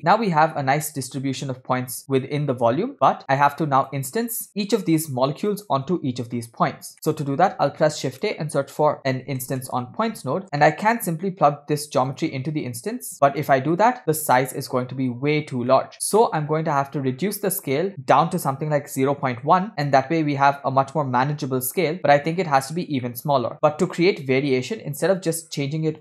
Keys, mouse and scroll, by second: 0.0-0.4 middle drag, 0.5-0.9 scroll down 2, 0.9-1.3 middle drag, 1.3-1.7 scroll up 3, 2.0 shift+middle drag, 2.9 middle click, 2.9 scroll down 1, 3.5 click, 4.5 middle click, 4.5 scroll down 1, 5.1-5.5 drag, 6.4-6.8 middle drag, 7.3 shift+a, 10.4-11.0 scroll down 2, 10.7 middle click, 11.4 scroll down 1, 12.2-14.0 drag, 14.1-15.0 scroll down 4, 15.0-15.3 scroll up 2, 15.9 middle click, 15.9-16.3 scroll up 2, 16.3 middle click, 17.0-17.5 scroll up 1, 17.6-19.7 shift+drag, 19.7 scroll up 3, 20.0-21.5 middle drag, 22.6-23.1 scroll down 3, 23.1 middle click, 23.5 shift+a, 25.1 shift+a.